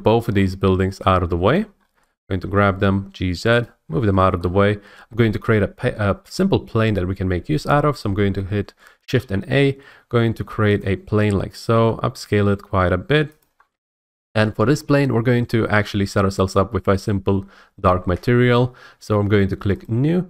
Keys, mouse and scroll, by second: 0.3 scroll, 1.0 click, 1.5 shift+click, 1.7-2.3 scroll, 2.4 typing, 3.6 click, 3.9 scroll, 4.4 shift+middle click, 4.5 scroll, 5.5 shift+middle click, 9.1 a, 10.8 click, 11.3-11.7 scroll, 11.7 s, 13.4 click, 13.9-14.2 scroll, 15.4 scroll down 1, 15.6-16.0 scroll down 1, 19.8 click.